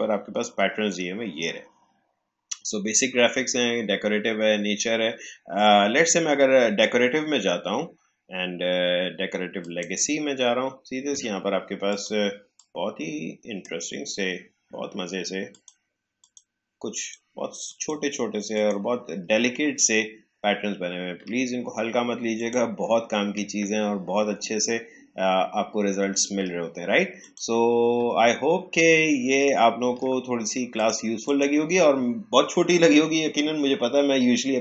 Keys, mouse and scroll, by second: 9.5-15.5 drag, 19.5 alt+scroll up 1, 20.3 alt+scroll down 1, 22.3 click, 23.5 alt+scroll up 1, 26.3-27.1 alt+scroll down 1, 27.1 click, 28.3-29.0 alt+scroll up 1, 29.5-29.9 alt+scroll down 1, 30.7 click.